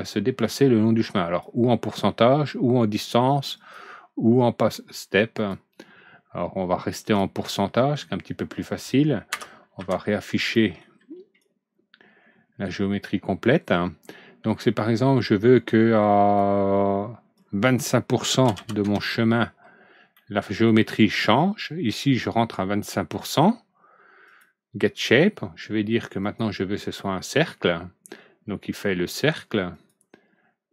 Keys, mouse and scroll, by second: 3.5 click, 5.3 click, 7.0 click, 7.8 scroll down 1, 8.3 middle click, 9.2 F4, 9.7 F3, 10.5 middle click, 10.9 middle click, 11.3-12.9 drag, 14.4-16.3 drag, 17.3 click, 18.3 KP_2, 18.5 KP_5, 18.7 KP_Enter, 20.1-20.6 middle drag, 23.0 click, 24.2 click, 26.1 click, 29.7 click.